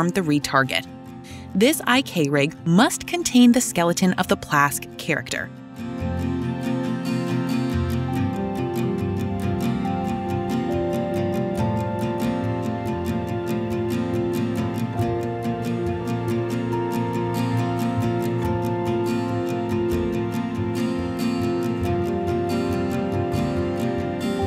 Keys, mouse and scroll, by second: 3.5 click, 5.8 click, 7.2 typing, 9.4 click, 12.4-15.1 typing, 21.2 click, 21.4 click.